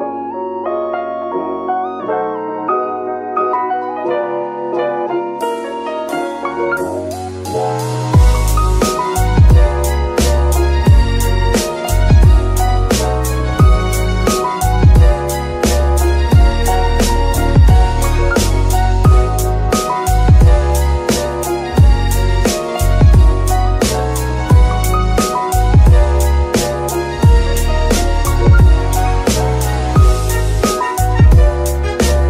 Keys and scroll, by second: 2.7 r, 2.9 x, 7.3 g, 7.7 Escape, 10.7 r, 10.8 x, 11.4 Escape, 15.9 r, 16.0 x, 16.5 Escape, 19.3 r, 19.5 x, 20.1 Escape, 22.2 g, 22.6 Escape, 25.2-26.3 typing, 25.9 Escape, 26.9 Escape, 29.3 r, 29.4 x, 29.9 Escape.